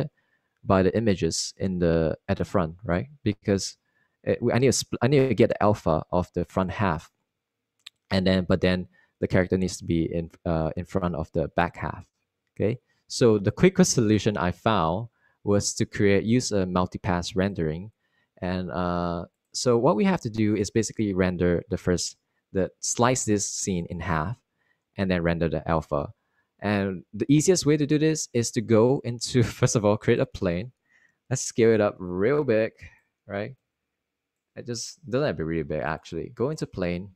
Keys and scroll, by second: 34.7-35.2 typing.